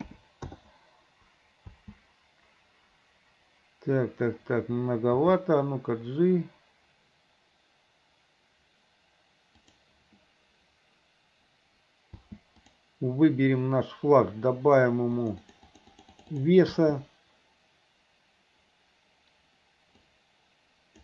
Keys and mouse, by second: 1.9 space, 5.4 g, 12.3 space, 12.8 click, 15.4 click, 15.6 click, 16.1 click, 16.3 click, 16.5 click, 16.8 space, 20.2-21.0 drag.